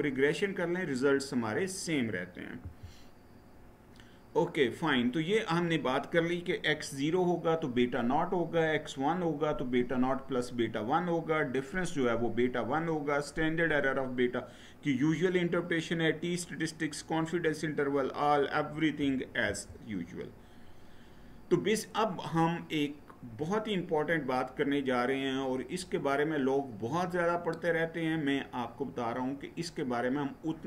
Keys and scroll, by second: 2.3 Right, 19.2 Right.